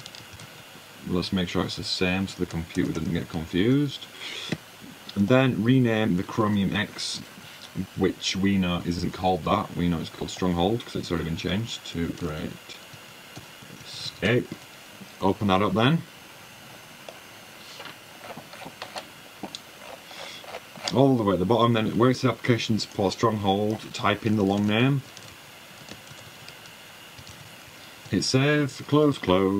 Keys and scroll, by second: 0.5-1.2 typing, 1.9 super+s, 4.3 typing, 4.6 super+Tab, 6.1 Up, 7.0 Up, 7.3 Left, 7.7 Down, 8.1 Down, 10.1-12.4 typing, 13.6-17.9 typing, 22.5-29.5 typing.